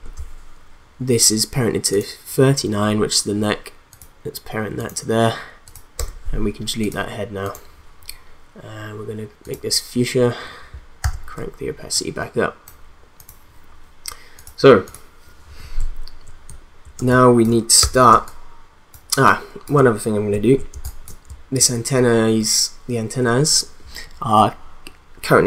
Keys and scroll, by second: 6.0 BackSpace, 11.1 t, 17.0 space, 17.8 v, 18.1 space, 20.7 space.